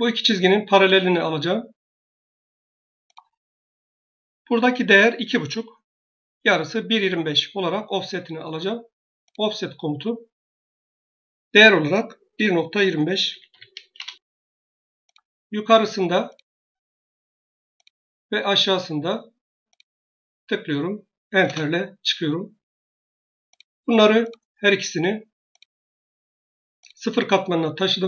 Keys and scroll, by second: 12.2-13.9 typing, 21.3 Return.